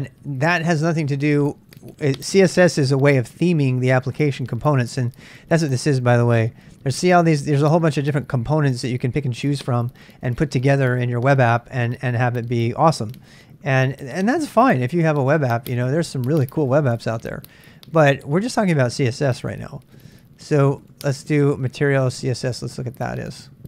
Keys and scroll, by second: 22.2 super+Tab.